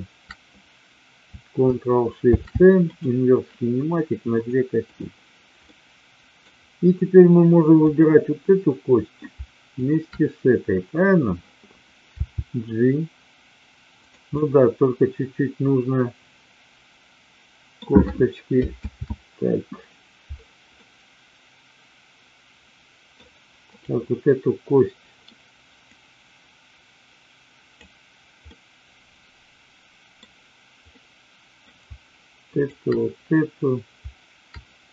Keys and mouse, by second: 3.0 ctrl+shift+c, 4.9 click, 5.7-6.4 middle drag, 7.9-8.9 drag, 9.8-10.7 shift+drag, 12.3 g, 14.3-17.8 middle drag, 18.9 ctrl+z, 20.8-23.1 middle drag, 25.9-27.9 drag, 28.4-30.1 middle drag, 30.8-31.7 middle drag, 32.5-33.5 shift+drag.